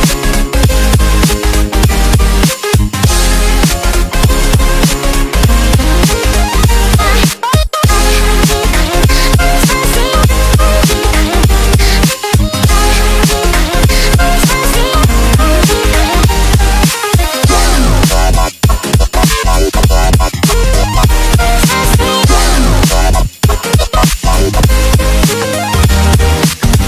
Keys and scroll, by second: 4.5 1, 6.5 1, 10.1 1, 16.0 1, 18.1 1.